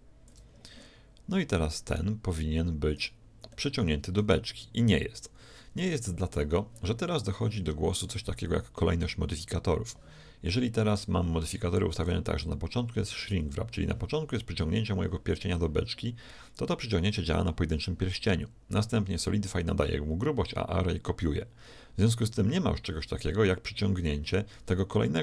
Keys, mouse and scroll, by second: 1.9-4.7 right drag, 3.5-5.3 middle drag, 10.9-12.7 drag.